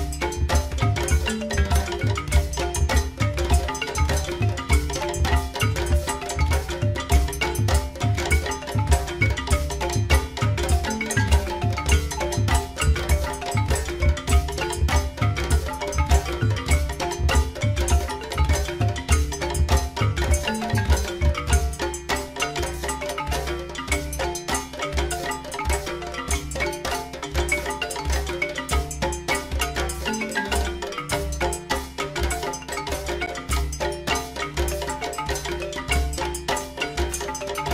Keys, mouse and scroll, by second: 0.4 click, 7.5 shift+d, 12.4 click, 20.6 KP_3, 23.0 g, 30.6 g.